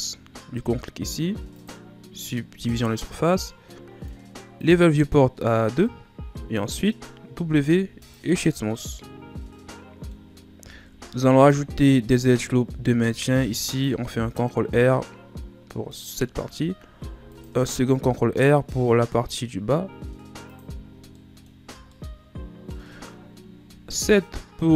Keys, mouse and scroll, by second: 1.6 click, 4.6-6.1 drag, 6.1-7.4 scroll up 1, 7.4 w, 8.6 scroll down 1, 8.8-10.3 middle drag, 10.3 scroll up 2, 10.6 Tab, 11.0 scroll down 3, 11.6-13.1 middle drag, 13.1 ctrl+r, 16.9 ctrl+r, 20.6 Tab, 20.9 scroll down 4, 21.1-21.6 middle drag, 21.6 a, 21.9-23.6 middle drag, 23.6 KP_7.